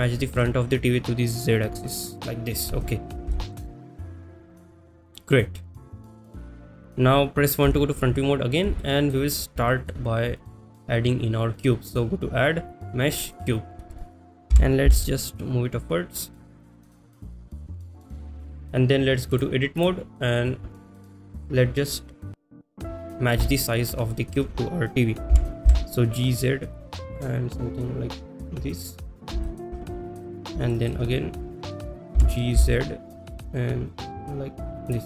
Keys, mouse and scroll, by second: 0.1 shift+middle drag, 2.3 click, 2.3 y, 3.4 shift+middle drag, 5.4 click, 5.6 middle click, 6.1 middle click, 6.5-6.9 middle drag, 7.9 KP_1, 8.9-9.2 shift+middle drag, 9.7 shift+middle drag, 10.4 shift+middle drag, 11.9-13.5 drag, 18.4 click, 19.5-20.0 drag, 22.2 click, 22.7 click, 23.6 shift+middle click, 24.2 shift+middle drag, 27.5 g, 27.5 z, 28.8 click, 29.5 shift+middle click, 30.2 click, 30.8 shift+middle click, 34.3 g, 34.3 z, 34.9 click.